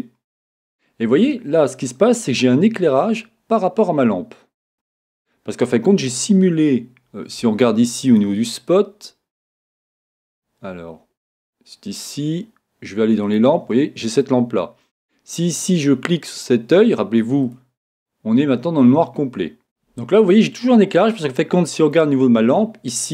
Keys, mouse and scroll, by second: 0.0-1.3 drag, 8.1-9.8 drag, 9.8-11.7 middle drag, 14.8 click, 17.4-19.4 drag, 20.3-22.2 middle drag, 22.4-22.9 scroll up 1, 22.9-23.1 middle drag.